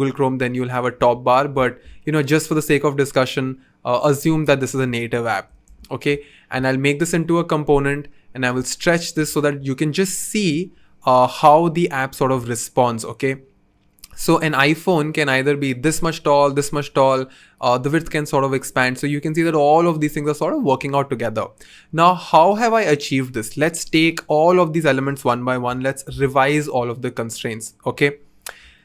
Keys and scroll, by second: 9.1 v, 25.7 Return.